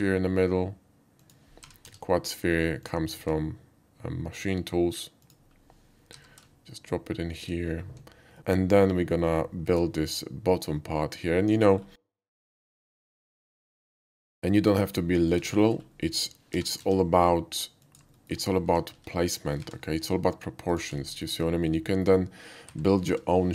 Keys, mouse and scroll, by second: 1.2 click, 1.6 g, 1.9 z, 2.8 click, 3.2 s, 5.2 click, 6.5 shift+g, 7.3 click, 8.3 shift+middle drag, 8.5 shift+middle click, 9.0 scroll up 1, 9.1 shift+middle drag, 9.7 shift+a, 11.5 click, 12.0 alt+middle drag, 12.5 alt+middle click, 13.5 shift+middle click, 13.6 shift+middle click, 14.0 s, 15.3 click, 15.5 shift+middle click, 15.9 shift+middle click, 16.5 g, 16.7 z, 17.0 g, 17.8 click, 18.2 middle click, 18.6 s, 18.9 x, 19.0 s, 19.6 y, 20.7 click, 21.1 alt+middle click, 21.7-22.0 alt+middle drag, 22.7 s, 23.0 y, 23.2 s.